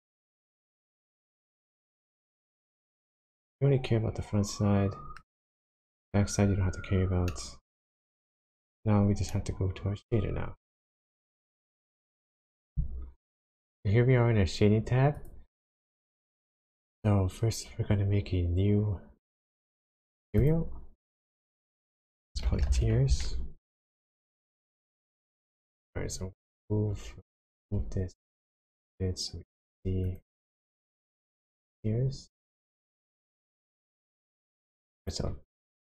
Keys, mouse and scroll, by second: 0.8-1.3 scroll up 3, 1.4 middle click, 1.4 scroll down 1, 5.5-7.3 scroll down 2, 7.3 middle click, 8.1-8.4 scroll up 1, 8.4 scroll down 1, 8.5 KP_1, 15.3 click, 20.4 click, 21.5 click, 27.6 g, 30.2 click, 31.8-32.8 scroll up 1, 32.8 click, 33.5 shift+middle click, 35.0 click.